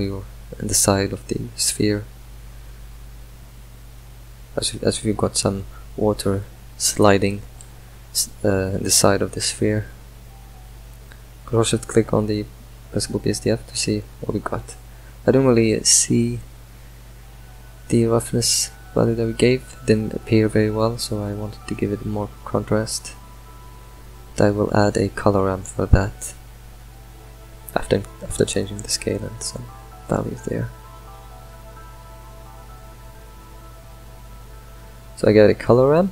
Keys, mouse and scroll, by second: 4.5 ctrl+shift+click, 12.4-19.5 middle drag, 19.5 ctrl+shift+click, 20.6-22.1 middle drag, 22.1-24.8 drag, 25.7-29.6 shift+drag, 30.1-33.3 shift+drag, 33.3 middle click, 34.4 middle click, 34.7 shift+a.